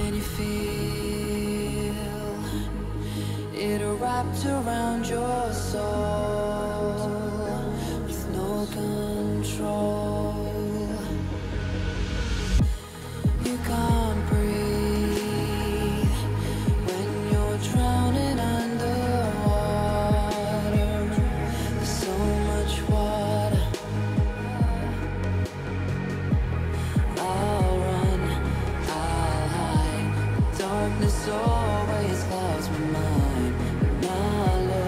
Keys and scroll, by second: 23.6 Return, 27.5 b, 28.5 ], 32.9 [.